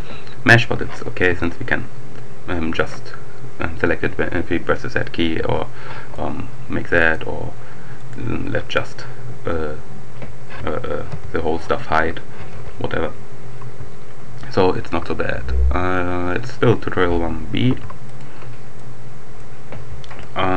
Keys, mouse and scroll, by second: 1.1 z, 1.7-2.2 scroll up 1, 4.4 z, 6.0 scroll up 2, 6.1 click, 6.4-6.9 scroll down 2, 7.8 scroll up 2, 8.0 click, 11.0 h, 12.5 alt+h, 17.7 ctrl+s, 18.0 ctrl+click, 18.8-19.9 drag.